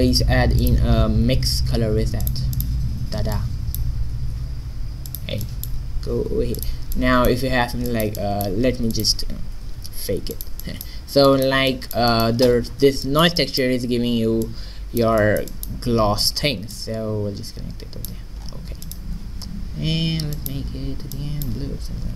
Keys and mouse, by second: 1.3 shift+a, 6.0 g, 9.0 click, 9.7 shift+d, 14.5-16.2 drag, 16.4 middle click, 18.5 middle click.